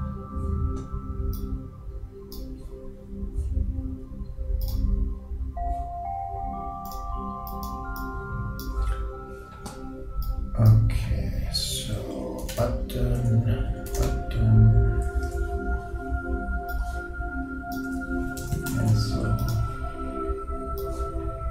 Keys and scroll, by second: 18.0 shift+Return, 18.2-19.0 typing.